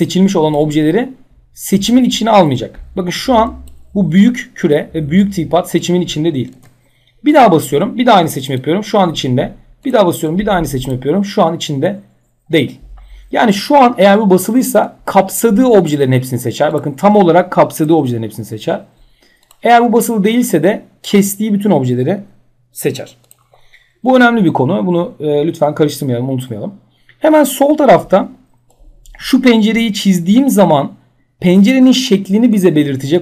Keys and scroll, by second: 6.1 ctrl+z.